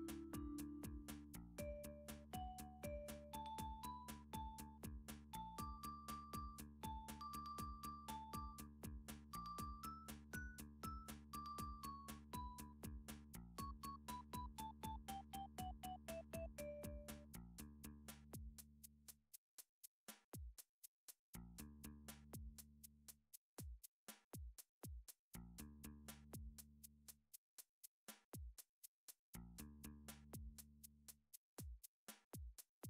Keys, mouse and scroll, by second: 11.0 middle click, 11.6 click, 15.0 middle click, 15.0 scroll up 3, 15.2 click, 15.8 shift+middle click, 16.0 click, 16.4 scroll, 16.6 middle click, 16.8 Tab, 17.0 middle click, 17.3 middle click, 18.5 alt+click, 19.4 typing, 20.3 middle click, 20.4 middle click, 20.9 shift+middle click, 21.0 shift+middle click, 21.4 middle click, 23.3 middle click, 24.4 e, 26.1 click, 26.8 s, 27.4 click, 29.6 middle click, 30.5 r, 31.5 click, 32.7 g.